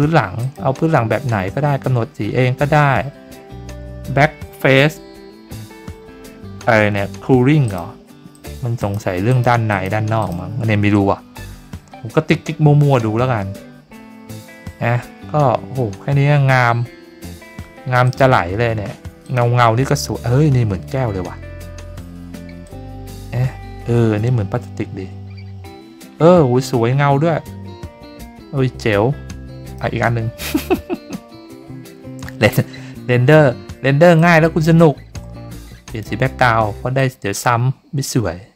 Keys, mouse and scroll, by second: 0.4 click, 7.6 click, 8.3 click, 8.8 click, 9.3 click, 9.7 click, 10.2 click, 18.0 click, 19.2 click, 22.6-29.7 drag, 34.1 click, 35.8 click, 36.9-38.5 drag.